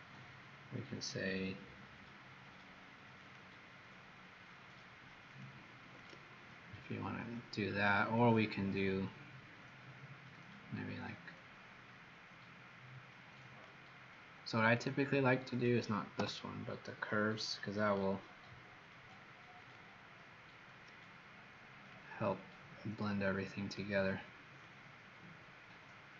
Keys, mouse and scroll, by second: 4.4 click, 5.9 click, 7.9 click, 14.8 click, 16.1 Delete, 17.7 click.